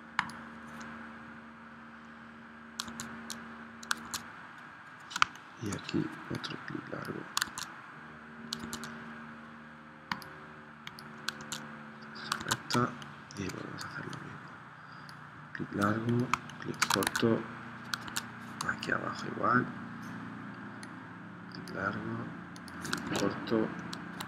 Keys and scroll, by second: 2.9 super+Tab, 4.1 super+Tab, 5.3 space, 7.5 super+Tab, 8.6 super+Tab, 11.4 super+Tab, 12.5 super+Tab, 12.8 space, 16.3 space, 17.0 super+Tab, 18.1 super+Tab, 23.0 super+Tab.